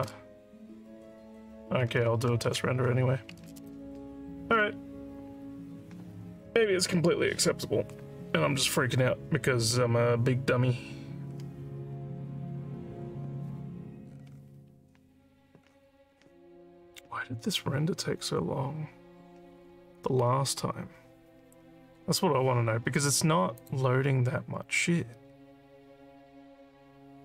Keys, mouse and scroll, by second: 2.5 ctrl+s, 23.6 click.